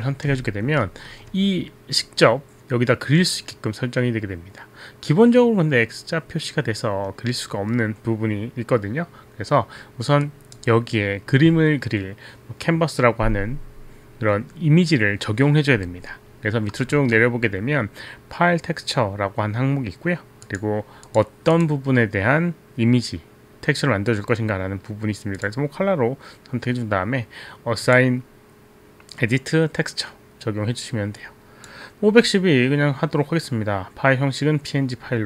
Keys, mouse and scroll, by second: 0.8 alt+middle click, 10.2 click, 20.5 click, 21.0 click, 21.4 click, 21.9 click, 25.4 click, 25.9 click, 27.8 click, 31.2 click.